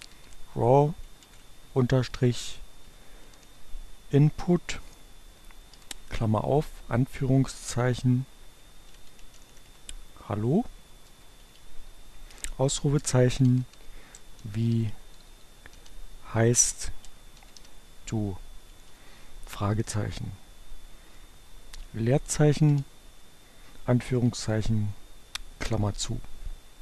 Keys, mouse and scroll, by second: 0.0-3.9 typing, 5.7 shift+8, 6.0 shift+2, 8.3-17.0 typing, 21.1 space, 21.4 shift+2, 23.8 shift+9.